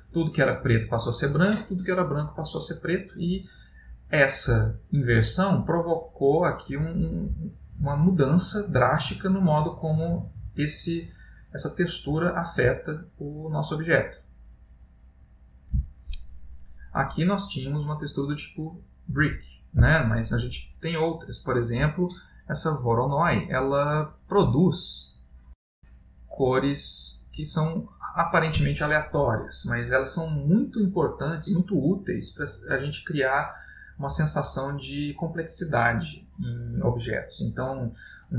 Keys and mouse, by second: 2.7 middle click, 4.4 middle click, 5.4 middle click, 6.5 middle click, 9.5 middle click, 11.3 middle click, 12.2 middle click, 16.4 middle click, 17.5 click, 19.4 x, 20.1 middle click, 21.3 click, 22.7 click, 26.5 click, 28.6 click.